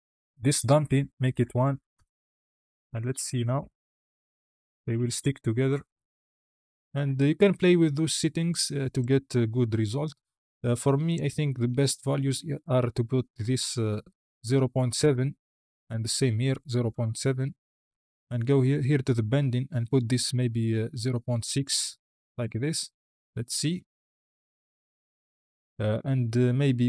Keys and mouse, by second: 0.3-1.8 drag, 3.1 space, 5.5 space, 5.8 click, 8.8 click, 11.0-14.9 drag, 15.8-17.4 drag, 19.1-22.3 drag, 23.5 space, 24.6 click, 25.7 space.